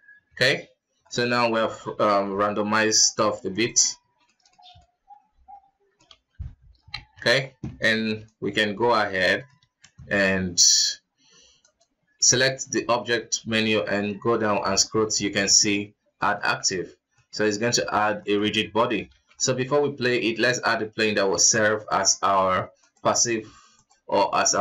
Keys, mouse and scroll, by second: 1.2-2.5 middle drag, 2.5 t, 3.7 click, 4.3 alt+a, 4.5-6.2 middle drag, 6.2 KP_1, 6.8-7.1 scroll up 1, 7.1 shift+z, 7.4-8.0 scroll down 2, 8.0 b, 9.3-9.7 middle drag, 9.7 shift+z, 11.8-14.9 drag, 17.3-18.0 middle drag, 18.0-18.4 scroll down 3, 18.4-18.7 middle drag, 18.7 scroll up 1, 18.8 KP_1, 19.5 alt+a, 19.5 middle click, 20.1 shift+a, 21.5 s, 22.6 s, 23.4 s, 24.4-24.6 middle drag.